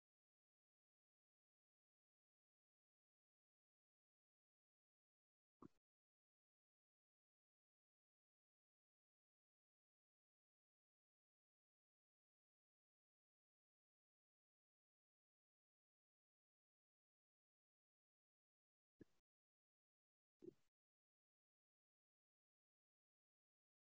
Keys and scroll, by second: 0.1 BackSpace, 1.7 typing, 4.3-6.3 typing, 7.4-9.8 typing, 12.9 shift+s, 12.9 w, 15.1 e, 17.5 t, 17.5 s, 18.0 space.